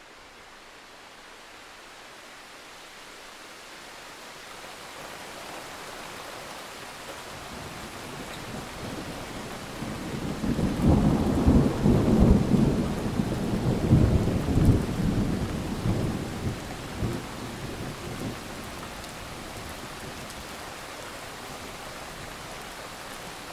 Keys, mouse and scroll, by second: 3.3 click, 3.4-5.5 scroll up 2, 5.5 click, 5.7-6.2 alt+scroll up 2, 6.2 ctrl+click, 6.4 ctrl+z, 6.7 click, 7.2 click, 8.2 shift+click, 9.2 click, 10.2 alt+click, 10.5-10.9 alt+scroll down 1, 11.3 click, 11.9-12.3 alt+scroll up 1, 12.3 click, 12.7 shift+click, 14.1 alt+click, 14.4-15.2 alt+scroll down 1, 15.2 click, 15.4 alt+scroll up 1, 16.3-19.9 drag, 20.1-21.6 alt+scroll down 3, 21.7 click, 21.8 ctrl+scroll up 1, 21.9 click, 22.7 shift+click.